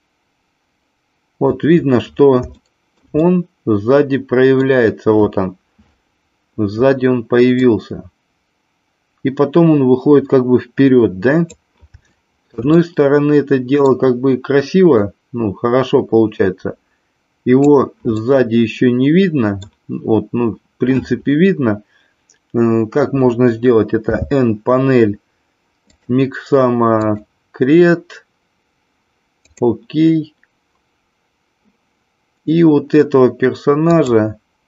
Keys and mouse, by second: 2.5-4.6 shift+middle drag, 7.6-11.5 drag, 12.1-12.6 shift+middle drag, 12.7-14.0 middle drag, 15.0-17.8 drag, 18.2-19.8 middle drag, 24.0 n, 26.9-31.3 drag, 33.8 click.